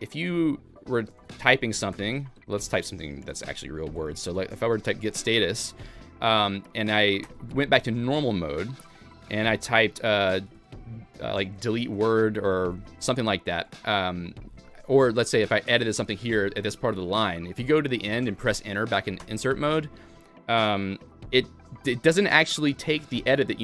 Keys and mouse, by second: 0.2-5.2 typing, 7.2 Escape, 10.4 d, 12.0 w, 12.7 Escape, 13.1-17.0 typing, 16.2 alt+x, 19.2 Return.